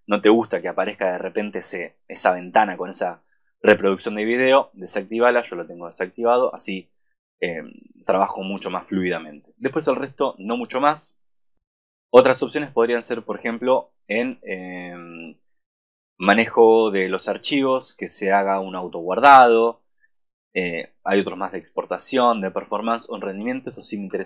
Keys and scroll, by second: 24.1 super+=.